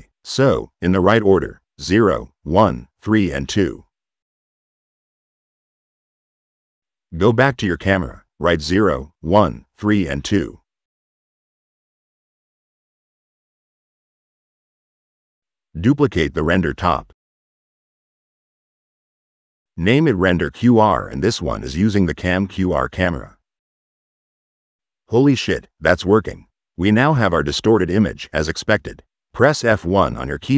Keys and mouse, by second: 7.9 click, 8.6 click, 9.7 click, 10.7 click, 14.2 click, 14.6 click, 15.7 click, 15.9-16.9 typing, 16.8 click, 17.5 click, 18.7 click, 22.2 click, 24.3 click, 25.4-29.2 drag, 29.7 click.